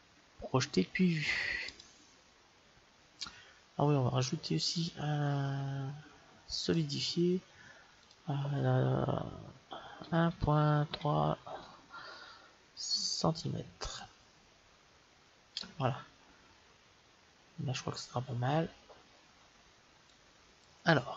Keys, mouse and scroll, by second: 4.6-6.5 drag, 7.9-9.7 drag, 20.0-21.1 drag.